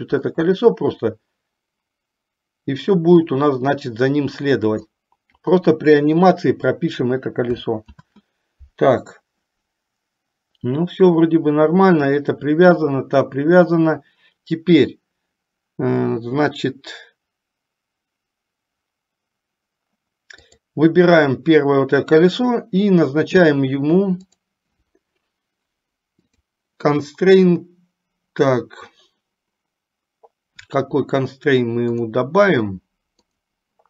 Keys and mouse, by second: 0.5-5.2 drag, 8.1 ctrl+z, 20.6 click, 26.4-29.0 drag, 33.4-33.8 drag.